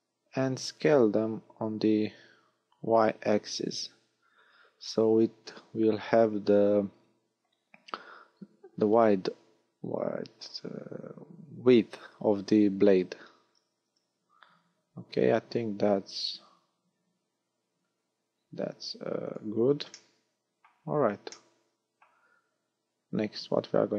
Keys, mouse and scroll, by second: 1.5 s, 6.2 click, 6.7-7.7 scroll up 3, 13.9 s, 19.3 click, 19.9 middle click, 20.7-21.1 scroll down 5, 21.3 middle click, 23.1 scroll down 1.